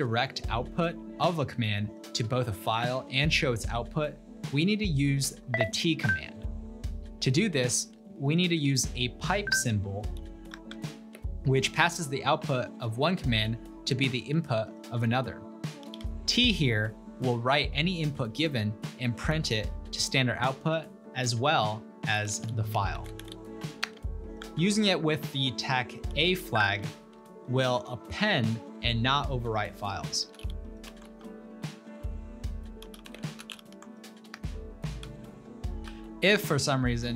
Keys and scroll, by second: 2.1 typing, 6.8 typing, 9.7-11.3 typing, 15.1-16.6 typing, 19.3 typing, 21.8-27.4 typing, 30.0-34.8 typing, 34.4 Return, 35.1 ctrl+l.